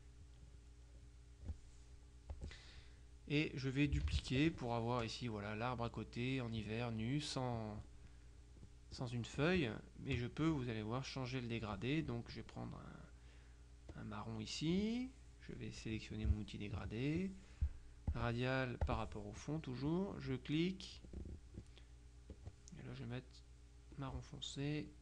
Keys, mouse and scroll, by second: 0.4-2.0 drag, 2.4 click, 4.1 ctrl+d, 4.5-7.6 ctrl+drag, 8.6 middle click, 14.0 click, 16.2 click, 18.2 click, 18.9 click, 20.0-21.5 drag, 22.4 click, 24.0 click.